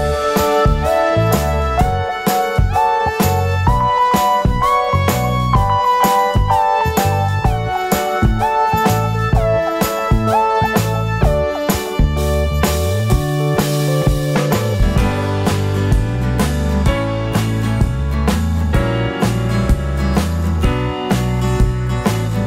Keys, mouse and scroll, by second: 0.5 `, 1.0 g, 2.0 1, 2.4 click, 3.0 g, 3.6 Tab, 4.7 click, 4.9 `, 5.2 Tab, 5.7 alt+click, 6.1 2, 6.2 alt+click, 6.6 ctrl+b, 7.4 Tab, 7.5 `, 8.1 Tab, 8.7 click, 9.2 3, 9.4 click, 10.0 c, 11.9 right click, 12.5 i, 13.3 click, 13.4 `, 13.8 g, 14.2 Tab, 15.1 ctrl+2, 15.4 Tab, 15.5 `, 15.9 click, 16.4 right click, 16.4 x, 17.1 Tab, 17.4-19.9 right drag, 18.6 Tab, 19.9 click, 20.1 Tab, 20.7 scroll down 1, 21.3 KP_4.